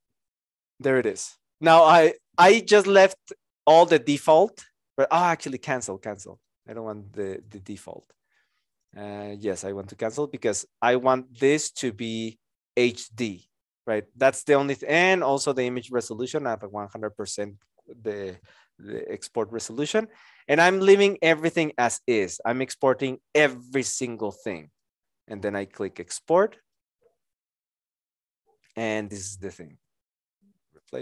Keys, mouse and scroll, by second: 29.6 Return.